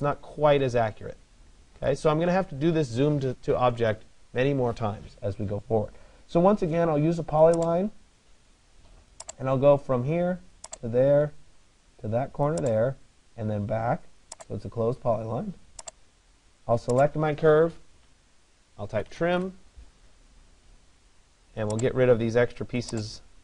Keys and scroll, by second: 19.0 Return.